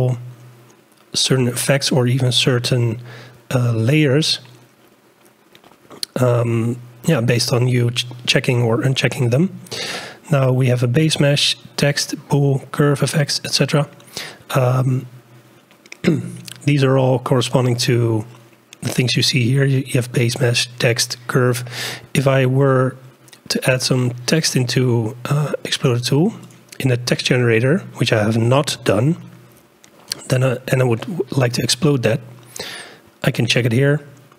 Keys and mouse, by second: 26.4 click.